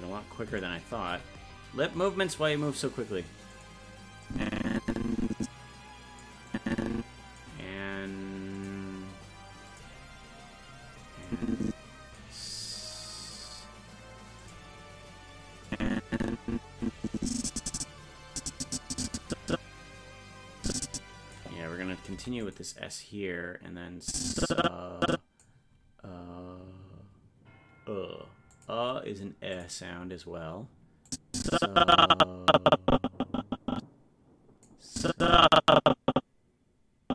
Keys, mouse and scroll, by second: 0.0 scroll up 1, 0.6-0.9 scroll up 4, 1.1 g, 4.3-6.2 drag, 6.5 click, 8.6 click, 9.7 click, 11.3 click, 13.3 click, 14.4 click, 15.7-21.3 drag, 24.0-25.4 drag, 28.5 click, 29.6 click, 31.1-34.7 drag, 34.9-37.1 drag.